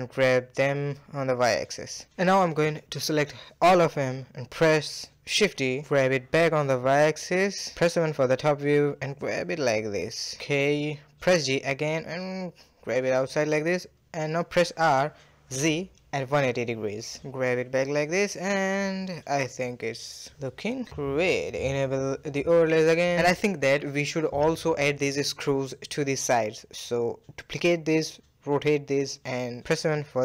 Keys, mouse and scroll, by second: 0.0-0.4 scroll down 1, 0.4-1.1 shift+middle drag, 1.1 shift+click, 2.2 shift+click, 3.1 shift+click, 4.1 shift+click, 4.7 ctrl+z, 5.4 shift+click, 5.9 shift+d, 7.6 KP_7, 8.7 g, 9.9-12.6 middle drag, 12.6 g, 14.5 r, 16.7 g, 17.9-20.2 middle drag, 20.2 click, 20.7-23.7 middle drag, 24.3 click, 25.1 shift+d, 25.8 r, 27.3-28.1 middle drag, 28.1 r, 29.4 KP_7, 30.0 g.